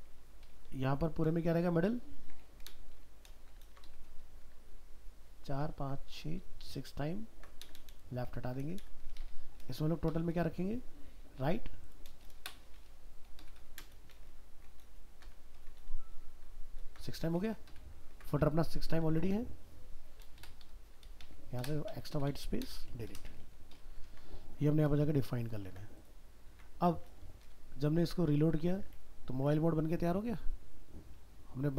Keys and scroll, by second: 1.8 ctrl+shift+Left, 3.6 ctrl+c, 4.4 ctrl+v, 6.2 ctrl+Left, 10.1 ctrl+shift+End, 10.3 ctrl+shift+Left, 14.3 ctrl+shift+Left, 14.9 ctrl+c, 15.8 ctrl+v, 18.1 ctrl+s, 24.1 ctrl+s, 26.5 alt+Tab.